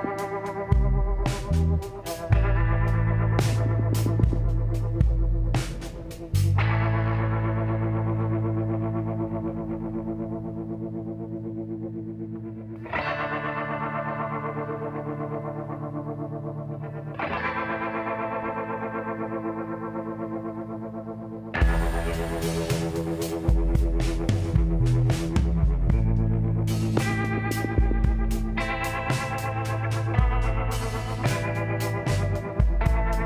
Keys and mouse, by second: 3.4 KP_7, 4.6-7.2 drag, 4.9 z, 7.6-9.3 drag, 8.6 s, 12.5-14.3 drag, 15.5-16.7 middle drag, 18.6 z, 20.5 KP_1, 21.1 z, 28.0 s, 31.1 middle click, 32.1 z, 32.9 click, 33.0 KP_1.